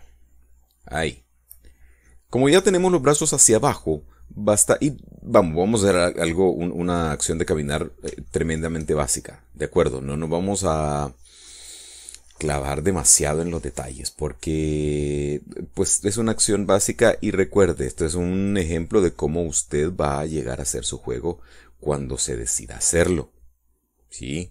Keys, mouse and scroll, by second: 0.0-2.2 shift+middle drag, 2.3 scroll down 1, 2.9-4.0 middle drag, 4.2 scroll down 1, 4.6-8.4 middle drag, 8.6 scroll down 1, 9.1 shift+middle click, 19.3 right click, 20.0-22.9 middle drag.